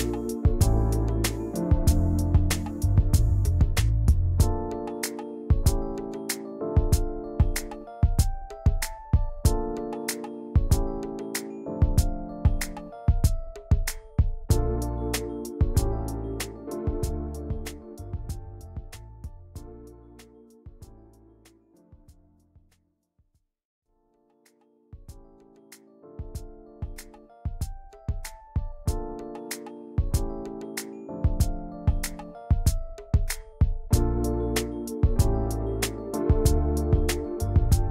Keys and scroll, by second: 2.0 \, 6.1 i, 7.6 v, 34.1 ctrl+[.